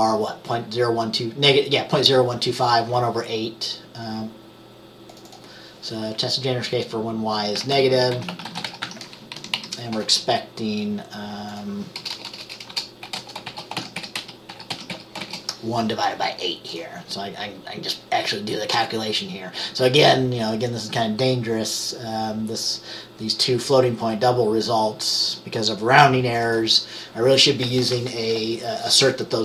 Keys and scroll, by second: 7.4-9.4 typing, 9.6 Down, 12.1-15.8 typing.